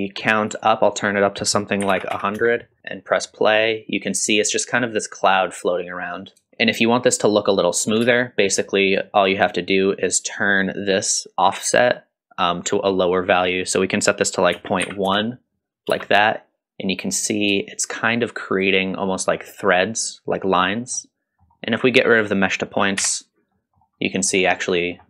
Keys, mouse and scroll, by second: 2.1 KP_0, 2.8 middle click, 2.8 space, 3.0-3.6 scroll up 2, 3.3 middle click, 6.5 shift+Left, 6.5 shift+middle click, 8.0 space, 13.4-15.7 drag, 15.9 space, 16.2-17.0 middle drag, 17.7-19.5 shift+drag, 20.9 middle click, 22.2 click, 23.0 m, 23.5 middle click, 24.0 middle click, 24.5 scroll up 1, 24.7 middle drag.